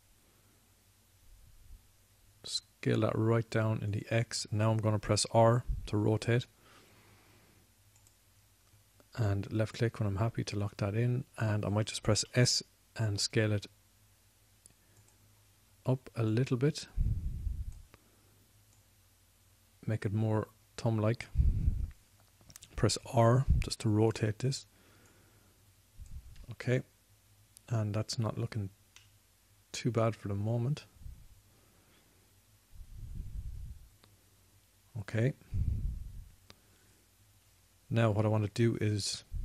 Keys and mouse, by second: 6.4 r, 13.5 s, 24.0 r, 30.8-32.2 middle drag, 33.8 middle click.